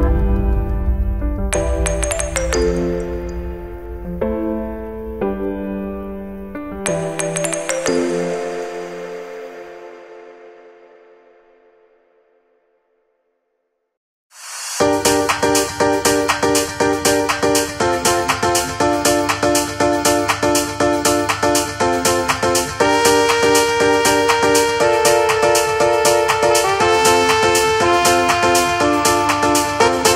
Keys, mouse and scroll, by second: 1.1 click, 2.1 g, 4.4 r, 5.8 g, 9.5 alt+shift+a, 10.2 l, 11.2 g, 15.3 click, 15.9 g, 20.3 click, 20.9 g, 22.7 click, 23.3 g, 27.2 click, 28.3 g.